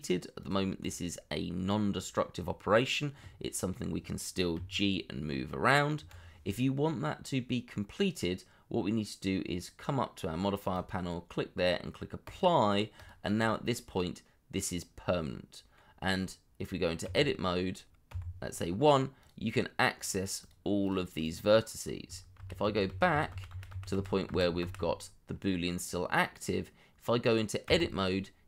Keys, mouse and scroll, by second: 0.8 double click, 4.5 g, 5.9 Escape, 13.3 double click, 13.9 middle click, 16.0-17.0 scroll up 1, 17.0 Tab, 18.0 1, 20.4 double click, 22.3 ctrl+z, 27.6 Tab.